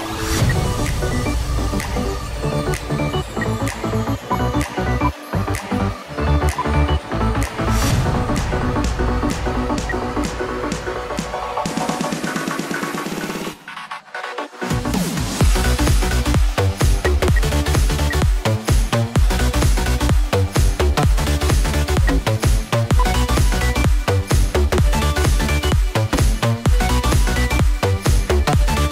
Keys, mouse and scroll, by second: 0.3 space, 0.8 double click, 3.4 1, 4.2 ctrl+click, 7.0 ctrl+scroll down 2, 10.0 F2, 16.8 space, 17.1 F2, 21.8 space, 22.8 ctrl+q, 23.2 ctrl+double click.